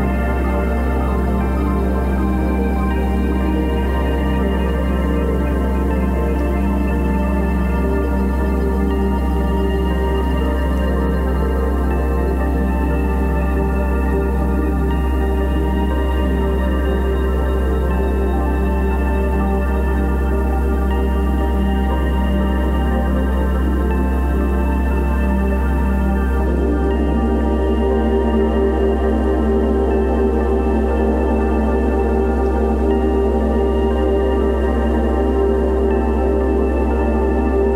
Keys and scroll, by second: 1.7 Return, 13.1 super+i, 15.5 b, 17.1 x, 18.2 [, 20.9 0, 25.2-26.6 typing, 28.2 ], 32.5 [, 34.7 space.